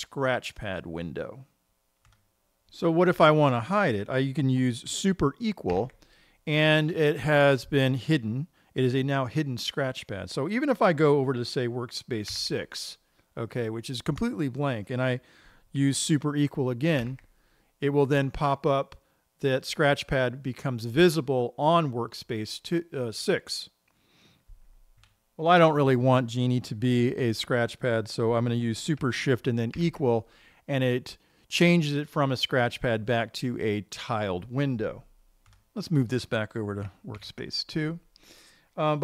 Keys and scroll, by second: 6.2 super+=, 12.7 super+6, 17.4 super+=, 30.3 shift+super++, 37.6 shift+super+@.